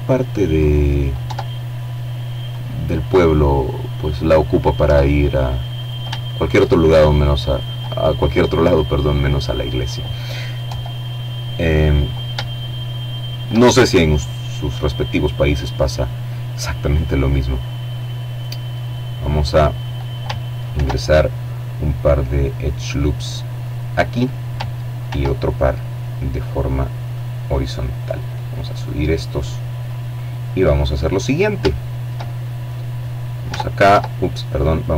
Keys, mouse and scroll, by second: 0.7-2.8 drag, 3.0 Tab, 3.9 shift+right click, 5.2 right click, 8.8 KP_7, 9.6-10.4 scroll down 2, 10.6-11.9 shift+middle drag, 14.9-17.1 middle drag, 17.1-17.8 scroll up 1, 18.9 ctrl+r, 20.7-21.3 scroll up 1, 21.7 click, 23.2 ctrl+r, 24.3-24.8 scroll up 2, 25.3 click, 26.5-28.8 drag, 29.5-29.9 scroll up 1, 29.9 shift+middle click, 30.4 shift+click, 31.6 Tab, 33.5 shift+right click.